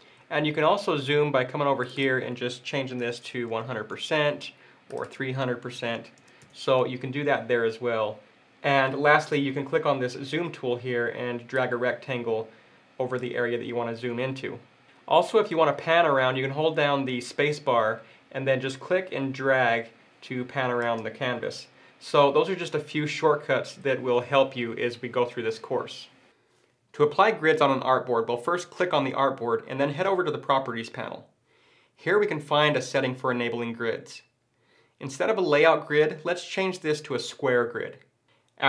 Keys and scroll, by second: 17.2 space.